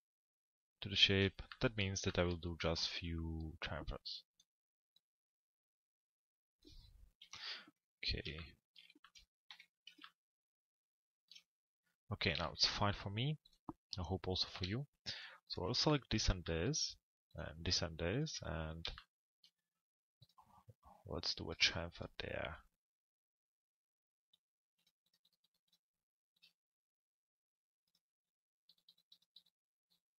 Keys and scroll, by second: 6.7 p, 9.5 z.